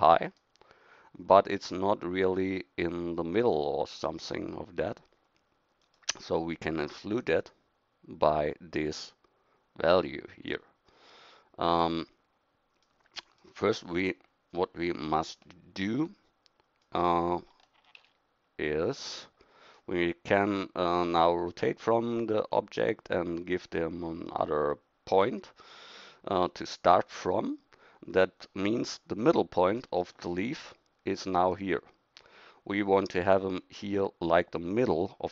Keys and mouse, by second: 0.4 middle click, 16.8-18.0 middle drag, 18.0 ctrl+z, 28.7 KP_1, 29.4 middle click, 31.9-35.3 middle drag.